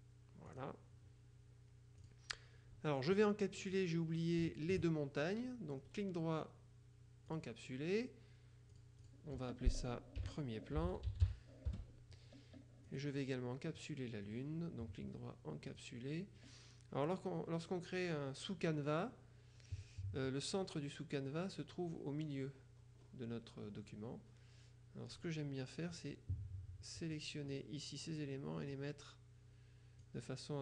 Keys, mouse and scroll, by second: 0.5 click, 2.1 click, 3.7 click, 4.5 shift+click, 5.9 right click, 7.3 click, 8.8 click, 10.3-11.9 typing, 13.0 click, 14.4 right click, 15.8 click, 22.2-23.6 scroll up 1, 25.2 click, 25.8 middle click, 26.0 click, 27.2-28.1 drag, 28.8-30.6 drag.